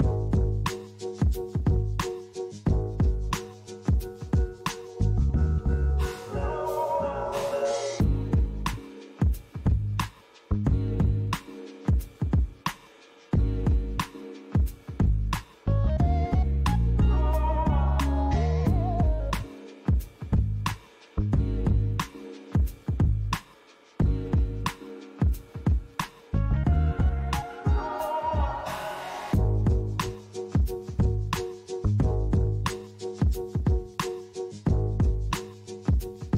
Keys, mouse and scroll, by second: 1.2 click, 2.3-3.8 scroll down 2, 3.8 click, 4.7 click, 7.8 click, 9.5 click, 10.5 click, 13.3 click, 13.9-15.7 scroll down 7, 15.7 click, 19.3 click, 20.7 click, 23.4 click, 26.7 click, 29.2 click, 30.8 click, 33.1-33.6 scroll down 2, 33.6 click, 34.7-35.3 scroll down 2, 35.3 middle click.